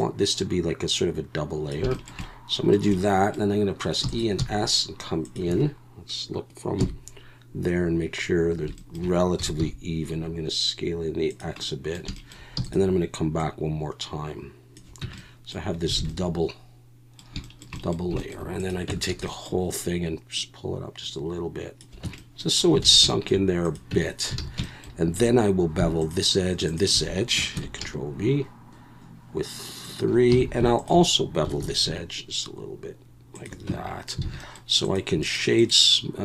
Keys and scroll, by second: 4.0 e, 4.4 s, 6.8 KP_1, 9.4 s, 9.6 x, 12.6 e, 15.0 Tab, 16.0 alt+a, 18.9 Tab, 19.1 a, 22.0 Tab, 22.8 alt+a, 23.9 Tab, 24.4 alt+a, 25.1 2, 27.5 ctrl+b, 30.4 alt+a, 31.6 ctrl+b, 33.7 Tab, 34.2 alt+a.